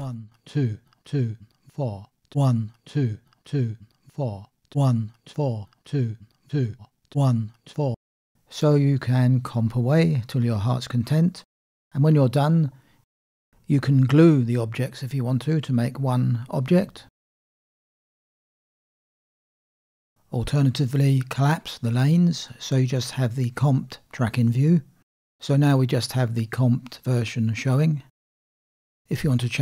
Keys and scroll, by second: 8.0 space, 16.1 ctrl+alt+g, 19.1 ctrl+z.